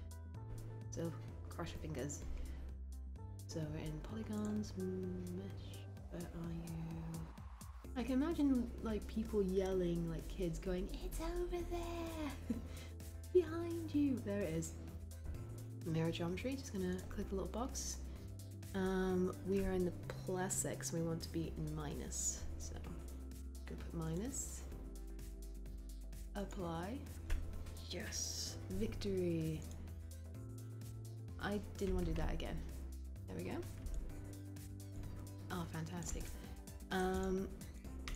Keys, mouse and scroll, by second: 31.9 ctrl+z.